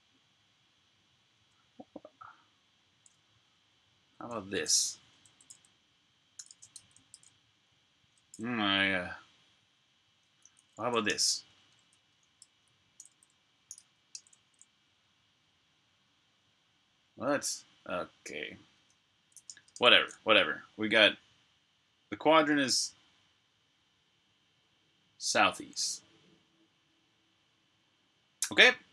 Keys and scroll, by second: 1.3 BackSpace, 4.1-7.2 typing, 10.3-14.2 typing, 18.7-19.9 typing.